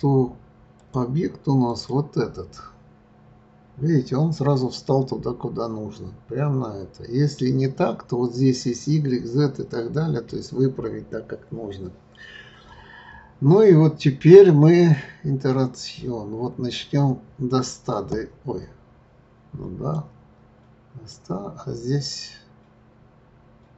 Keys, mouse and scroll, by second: 0.3-0.8 scroll down 1, 0.8 click, 11.6-14.8 scroll down 3, 14.9 click, 21.1 click.